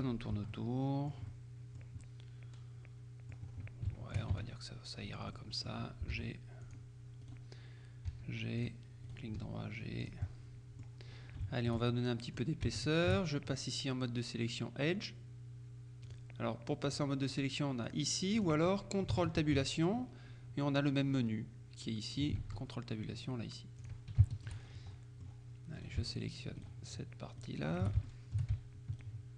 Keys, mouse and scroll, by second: 0.5 Tab, 0.6-1.7 middle drag, 2.1 click, 3.6-4.0 scroll up 1, 4.0 shift+click, 4.4 shift+Tab, 5.1 right click, 5.5 click, 6.2 g, 6.7 click, 7.3 right click, 8.2 g, 8.7-9.7 drag, 9.1 right click, 9.5 g, 10.1 click, 10.3 right click, 11.2-11.5 scroll up 1, 11.5 shift+middle click, 12.8 shift+middle click, 16.1 click, 16.9-18.0 drag, 18.5 click, 19.5 ctrl+Tab, 22.5 ctrl+Tab, 23.9 click, 24.3 shift+right click, 24.7 shift+scroll up 1, 25.0 shift+middle click, 26.1 shift+right click, 26.7 shift+right click, 27.5 right click, 28.1 shift+click.